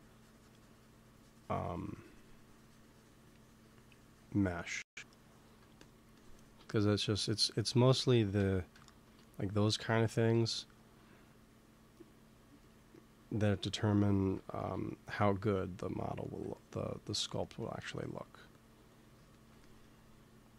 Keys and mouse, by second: 4.7-6.9 drag, 6.9 KP_1, 7.8 ctrl+z, 8.1 ctrl+z, 10.0 g, 10.2 f, 11.1-13.1 drag, 13.3 ctrl+s, 14.2 KP_1, 14.5 KP_3, 16.9-18.4 middle drag, 18.4-20.4 drag.